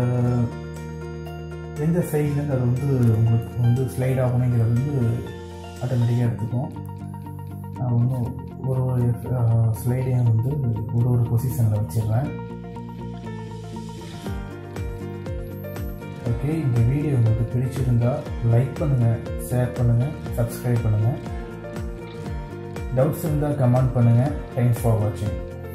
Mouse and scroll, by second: 14.9 right click.